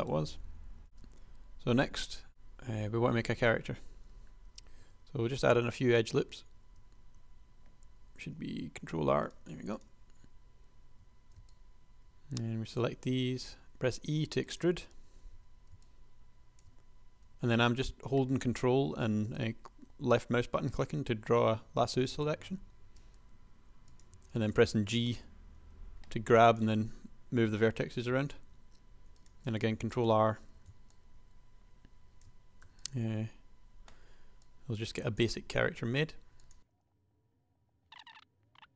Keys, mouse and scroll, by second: 0.8 super+a, 4.8 super+r, 7.1 r, 8.7 r, 11.1 a, 13.4 e, 15.6 a, 17.3 g, 21.9 a, 23.2 g, 24.4 a, 25.8 g, 28.5 ctrl+r, 30.7 a, 32.7 e, 35.6 s, 36.9 super+a, 37.1-38.7 typing, 37.2 click, 37.5 ctrl+z.